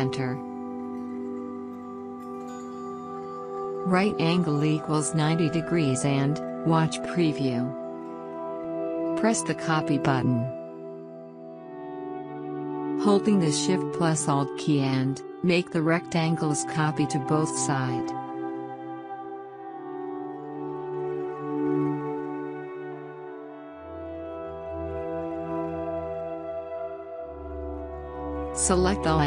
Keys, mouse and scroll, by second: 6.0 click, 13.1 alt+scroll up 1, 13.7-14.1 alt+scroll up 2, 14.1 space, 14.4 click, 14.5 space, 16.9-20.3 drag, 18.3 click, 20.3-29.2 shift+drag.